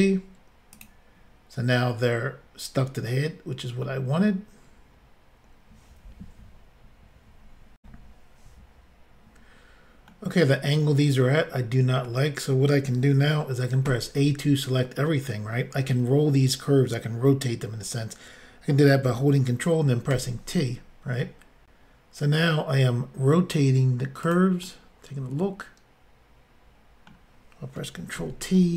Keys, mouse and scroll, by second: 0.8 click, 0.9 click, 2.1 middle click, 7.8 Insert, 10.1 middle click, 11.3 middle click, 13.9 a, 20.1 ctrl+t, 24.3 click, 24.3 click, 24.6 middle click, 28.2 ctrl+t.